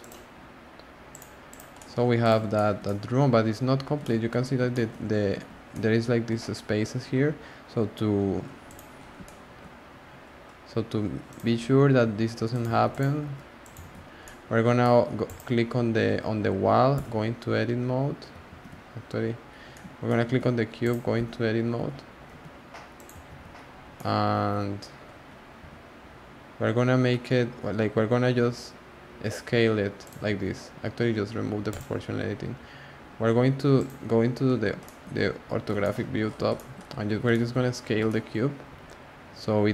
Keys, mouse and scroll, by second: 1.7-2.2 middle drag, 2.2 click, 2.5-3.7 shift+middle drag, 3.7 scroll up 2, 4.0 shift+middle click, 4.4-5.7 scroll up 2, 4.7 shift+middle drag, 5.7-8.6 middle drag, 8.6 click, 8.9-9.2 scroll down 2, 9.2 shift+middle click, 10.0 scroll down 1, 10.0-10.4 scroll up 1, 11.2 click, 12.0 g, 12.7 z, 12.9 click, 13.2 g, 13.8 z, 14.2-15.2 middle drag, 15.2 click, 16.9 Tab, 18.5 z, 19.5 scroll down 1, 19.5 scroll up 1, 19.6 scroll down 1, 19.7-20.8 middle drag, 20.8 click, 21.1 Tab, 21.7 a, 22.3 g, 23.2 z, 23.6 scroll down 2, 23.9-25.0 middle drag, 25.0-25.6 scroll up 1, 25.6 s, 30.2 z, 31.7 click, 33.7 click, 34.6 scroll up 2, 34.8-35.1 shift+middle drag, 35.1 scroll down 1, 35.2-35.5 scroll up 1, 35.5 alt+z, 35.8 shift+middle drag, 36.0 scroll up 4, 36.2 scroll down 1, 36.3 scroll up 1, 36.5-36.9 shift+middle drag, 36.9 scroll down 1, 36.9-38.1 scroll up 12, 37.3 shift+middle drag, 38.1-38.7 shift+middle drag, 38.7 s.